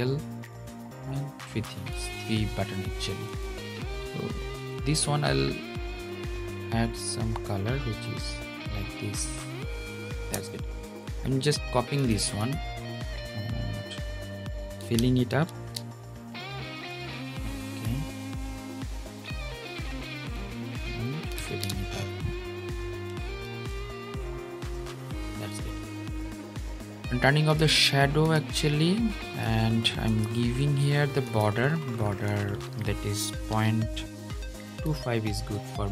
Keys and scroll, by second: 15.2 super+v, 21.0 super+b, 23.2 super+v.